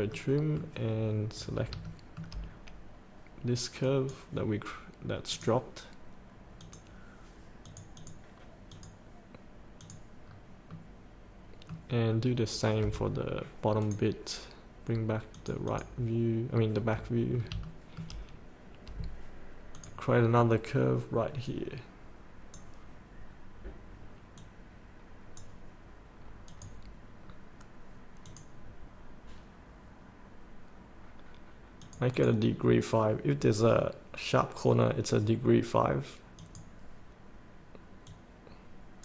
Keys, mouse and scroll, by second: 1.8 shift+middle click, 2.5 scroll down 1, 3.8 click, 5.6 click, 10.3 scroll up 1, 10.7-12.6 middle drag, 13.8-16.7 drag, 16.7-17.2 scroll down 1, 17.4 scroll down 1, 17.6 shift+middle click, 18.2 scroll up 1, 19.8-25.9 drag.